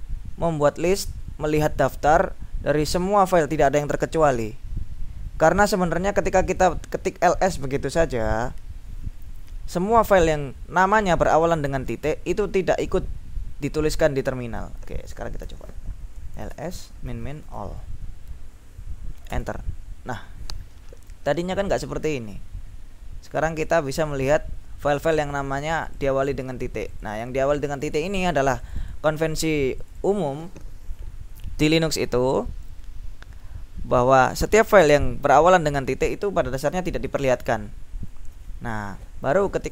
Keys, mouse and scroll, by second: 6.6 click, 11.5 click, 15.5 ctrl+l, 16.1-18.2 typing, 19.4 Return, 20.9-23.3 scroll up 2, 23.4-24.0 scroll up 1, 25.2 click, 26.0 click, 26.6-27.9 drag, 28.0 click, 29.0 click, 29.8 click, 38.1-39.7 scroll down 5.